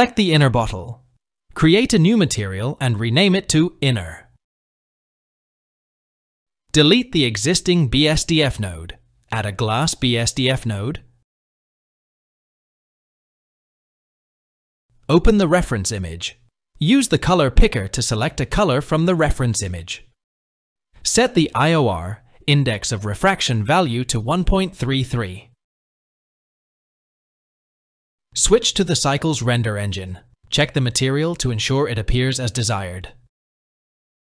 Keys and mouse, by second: 2.6-4.9 drag, 4.3 n, 8.1 typing, 9.9-13.2 drag, 15.3 click, 18.3 click, 22.1-24.2 drag, 23.9 KP_3, 28.3-29.3 shift+drag, 29.6 click.